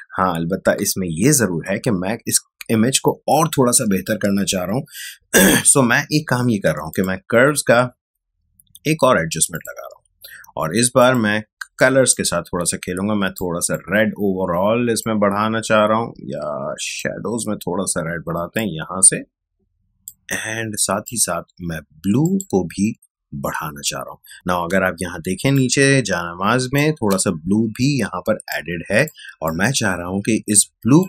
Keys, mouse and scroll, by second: 6.9 click, 9.5-21.0 drag, 24.3 ctrl+space, 25.5 ctrl+click, 25.6 ctrl+space, 27.5 space, 28.4 click, 28.6 space, 29.4-31.0 ctrl+drag.